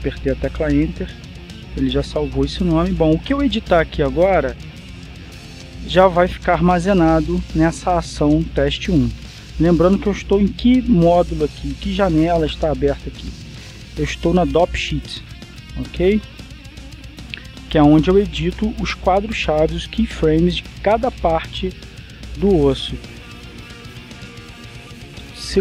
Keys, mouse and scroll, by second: 0.8 Return, 4.9-7.6 drag, 14.1 click, 17.7 Escape, 19.9-21.6 drag, 24.4-25.6 shift+middle drag.